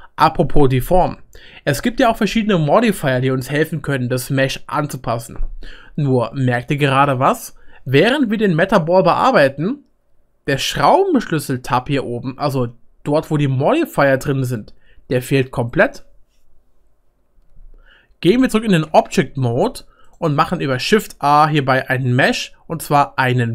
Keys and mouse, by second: 18.9 Tab, 20.1-23.5 shift+right drag.